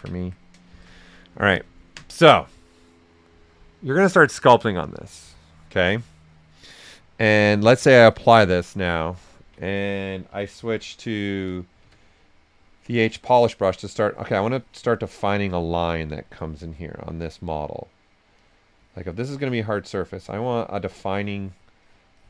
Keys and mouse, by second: 0.1 q, 0.6 shift+f, 0.9 right click, 1.7 typing, 5.7 right click, 5.7 typing, 7.6 click, 8.5 right click, 10.0-11.8 typing, 11.4 click, 11.9-13.5 drag, 16.5 right click, 17.2 click.